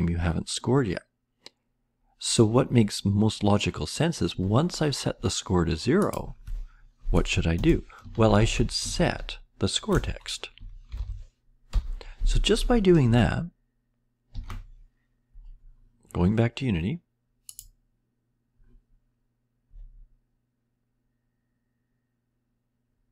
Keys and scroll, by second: 7.5 Return, 7.9-9.5 typing, 9.9 Return, 10.6-12.1 typing, 14.3 ctrl+s.